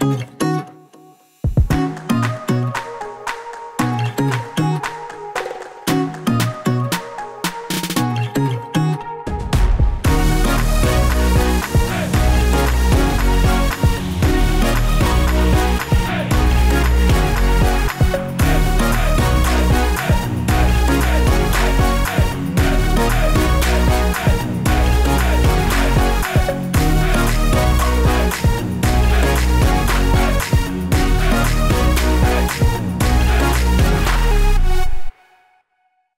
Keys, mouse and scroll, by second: 0.6 click, 1.7 i, 3.2 click, 4.0 click, 5.4 i, 6.1 click, 7.5 click, 12.3 click, 17.2 click, 18.3 click, 19.4 s, 20.3 i, 22.5 click, 24.1 s, 26.6 click, 26.6 typing, 28.0 click, 28.4 click, 30.8-32.0 scroll up 4, 32.0-32.6 scroll down 2, 34.2-35.8 scroll up 1.